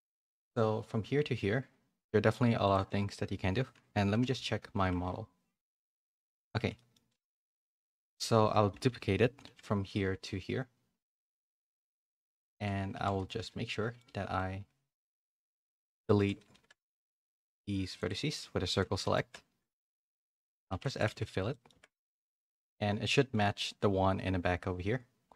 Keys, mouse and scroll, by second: 2.6 click, 4.1 /, 4.8 Tab, 5.0 middle click, 6.7 middle click, 7.6 /, 8.8 KP_3, 9.4 shift+d, 11.9 shift+middle click, 12.3 Tab, 12.5-14.0 typing, 13.6 middle click, 14.3 middle click, 15.4 shift+middle click, 16.1 z, 16.4 a, 16.6 a, 16.9 c, 18.1 x, 19.0 middle click, 19.4-21.0 typing, 21.4 middle click, 21.7 Tab, 22.1 a, 22.1 middle click, 23.1 middle click.